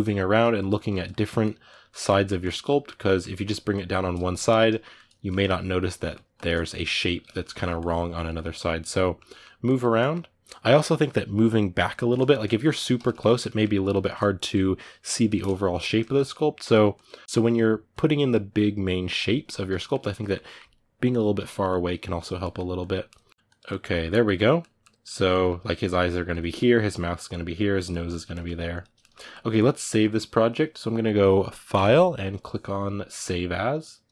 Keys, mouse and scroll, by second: 1.4 click, 1.8 middle click, 2.2 click, 2.4 middle click, 3.2-4.7 drag, 4.7-6.1 middle drag, 6.1-7.2 drag, 7.2 ctrl+middle click, 7.5 click, 8.3-9.4 middle drag, 9.4 click, 9.7-16.4 middle drag, 16.4 click, 17.0 middle click, 17.9-19.5 drag, 19.5-21.9 ctrl+middle drag, 21.9 click, 22.2 ctrl+middle click, 22.5 click, 22.8 middle click, 23.3 click, 23.4-28.5 middle drag, 28.5 click, 28.8 ctrl+middle click, 29.3-34.1 drag.